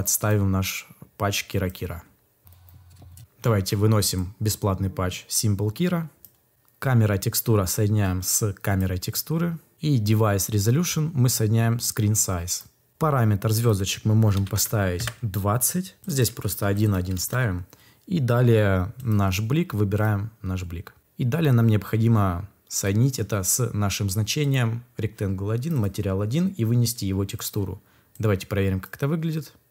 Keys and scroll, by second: 14.0-14.9 typing, 16.5 1, 17.1 Return.